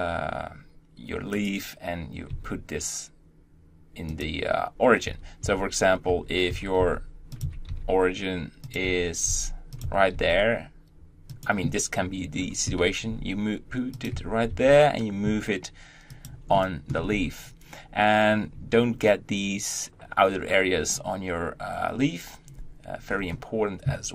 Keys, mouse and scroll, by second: 2.1 g, 4.9 Tab, 5.2 Tab, 6.0 Tab, 6.3 Tab, 6.6 g, 7.2 Tab, 7.5 g, 8.6 Tab, 9.2 g, 9.6 Tab, 9.9 g, 12.4 Tab, 12.8 g, 13.9 Tab, 15.9 g, 16.3-16.9 shift+middle drag, 16.9-18.8 scroll up 2, 18.8-22.4 scroll up 1, 22.4-23.0 scroll up 1, 23.0-23.6 scroll down 1.